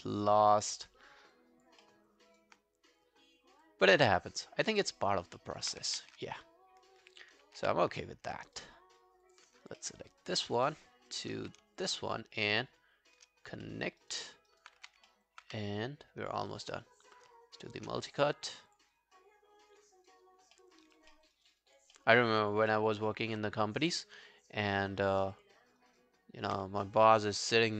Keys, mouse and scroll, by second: 0.2 alt+click, 0.8 alt+middle click, 1.4 alt+click, 1.9 alt+middle click, 2.3 alt+right click, 4.7 alt+middle click, 4.9 alt+right click, 5.4 alt+middle click, 6.0 ctrl+z, 7.6 q, 7.9 right click, 9.6 alt+scroll down 1, 9.8 alt+middle click, 10.1 alt+right click, 10.4 alt+click, 10.7 alt+middle click, 10.9 alt+right click, 11.8 shift+click, 12.1 shift+right click, 13.4 shift+scroll down 1, 13.7 alt+middle click, 14.0 alt+right click, 14.3 alt+middle click, 14.5 alt+right click, 14.8 q, 15.1 alt+middle click, 15.5 q, 15.6 right click, 16.9 shift+right click, 20.0 right click, 20.6 alt+middle click, 20.9 alt+right click, 21.1 alt+middle click, 21.4 alt+right click, 21.6 alt+click, 22.0 alt+middle click, 22.2 alt+right click, 22.4 alt+click, 22.7 alt+middle click, 23.0 alt+right click, 26.2 scroll down 1, 26.9 alt+middle click, 27.2 alt+scroll down 1, 27.4 alt+click.